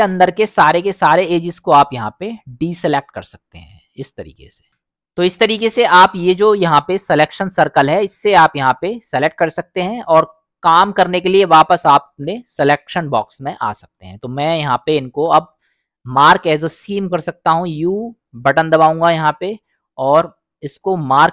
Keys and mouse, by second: 5.9-14.0 drag, 15.7-16.3 middle drag, 17.9 u.